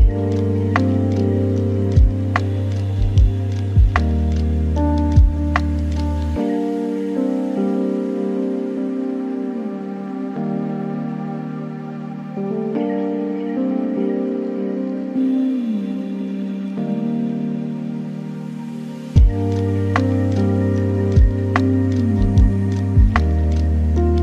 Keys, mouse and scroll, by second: 1.3 shift+a.